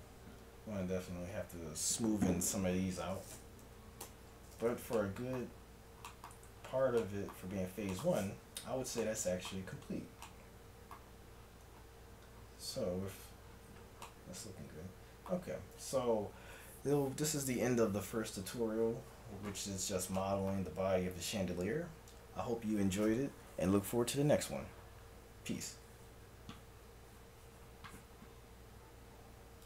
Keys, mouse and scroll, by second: 3.6 KP_1, 4.1 Tab, 8.5 a, 12.1 middle click, 15.9-19.8 middle drag.